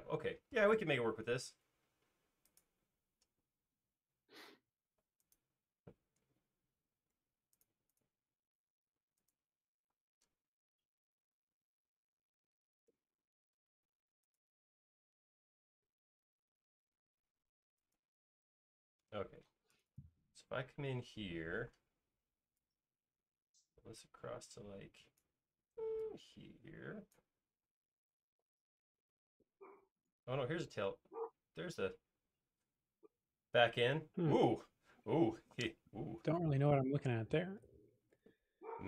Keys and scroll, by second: 3.7 q, 6.2 Escape, 7.1 Right, 9.9 m, 19.0 space, 21.6 p, 25.8 e, 27.7-28.0 typing.